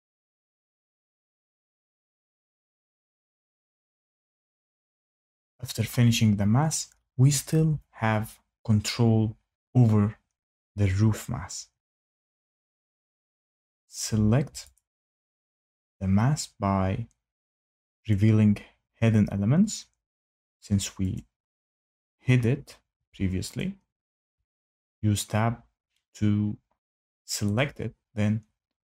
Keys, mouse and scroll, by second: 14.7 click, 18.1 click, 21.1 click, 22.9 Tab, 23.5 click, 24.3 Tab, 24.8 click, 27.5 right click.